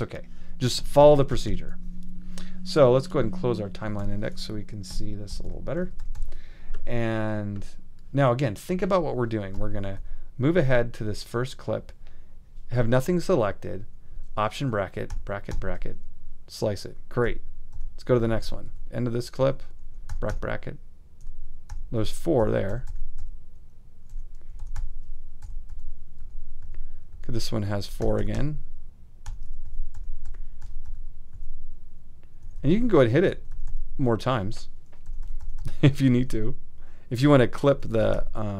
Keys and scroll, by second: 1.0 super+], 5.3 super+], 5.8 super+=, 9.5 i, 15.1 alt+], 17.2 i, 19.9 alt+;, 20.1 alt+], 22.4 alt+', 24.5 alt+;, 24.6 alt+], 25.4 alt+', 27.8 alt+', 28.0 alt+], 29.6 alt+', 32.4 ;, 33.2 alt+;, 33.3 alt+], 35.1 alt+', 37.7 alt+;, 37.8 alt+].